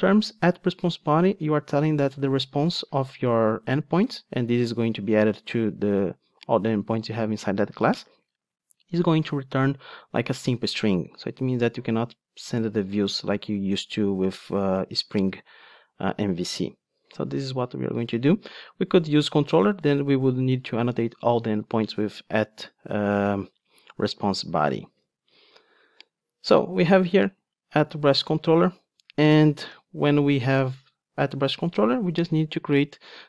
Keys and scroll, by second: 15.3 ctrl+Tab, 23.2 super+b, 25.1 ctrl+Tab, 29.7 Tab.